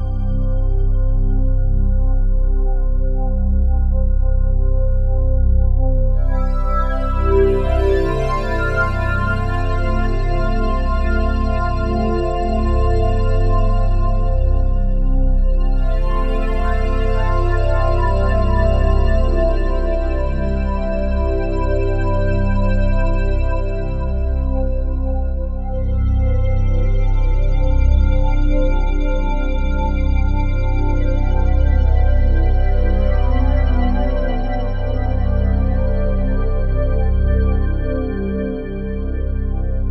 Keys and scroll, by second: 33.1 ctrl+z.